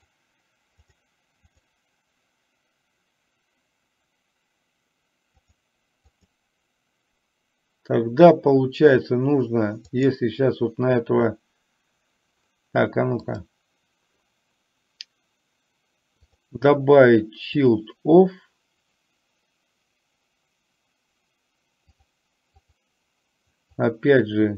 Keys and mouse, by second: 0.0 click, 0.9 click, 10.0 click, 13.5 click, 16.4-17.8 drag, 22.0 click, 22.8 click, 23.9-24.5 drag.